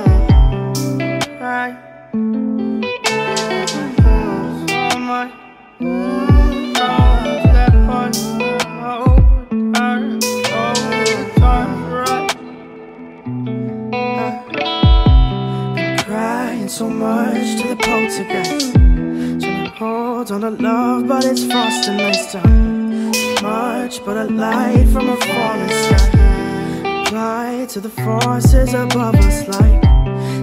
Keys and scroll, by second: 3.5 ctrl+space, 13.9 ctrl+g, 22.9 ctrl+shift+].